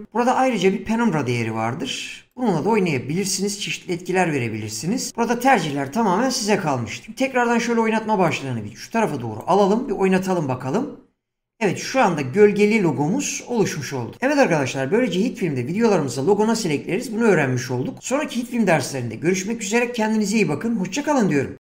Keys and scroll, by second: 9.7 space.